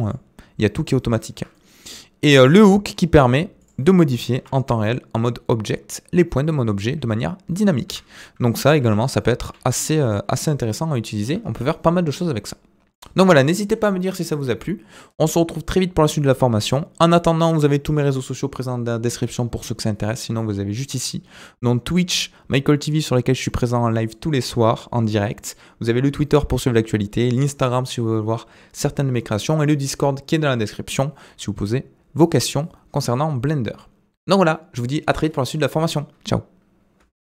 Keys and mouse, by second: 1.3 Tab, 1.5 middle click, 4.3 g, 8.8 g, 9.4 g, 12.9-13.6 middle drag.